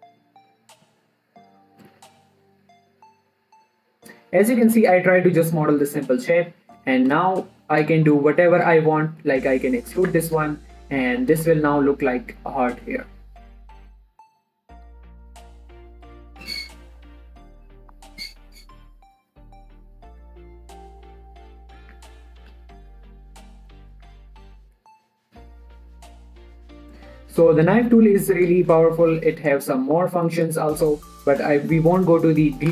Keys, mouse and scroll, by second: 5.3 Return, 5.9 click, 7.8 middle click, 8.2-8.5 scroll up 1, 8.5 middle click, 8.8 shift+middle click, 9.7 e, 10.3 click, 10.5 Tab, 10.7 middle click, 11.0 shift+middle click, 11.2-11.8 scroll up 2, 11.3 middle click, 11.8 click, 12.0-13.9 middle drag, 13.9 click, 17.0 middle click, 17.7 scroll down 1, 17.8 middle click, 18.4 scroll up 1, 18.5 middle click, 18.8 Tab, 19.0-19.4 scroll up 1, 19.4 middle click, 19.9 e, 20.3 click, 20.6 s, 21.3 click, 21.4 Tab, 21.6 scroll down 1, 21.7 middle click, 22.2 scroll up 1, 22.3 Tab, 22.9 e, 23.2 click, 23.5 s, 24.3 click, 24.5 Tab, 24.6 scroll down 1, 24.7-26.4 middle drag, 26.4 scroll down 1, 26.6 middle click, 28.1 shift+middle click, 28.8 Tab, 29.1 shift+middle click, 30.1 click, 30.4-30.8 scroll up 1, 30.8 middle click.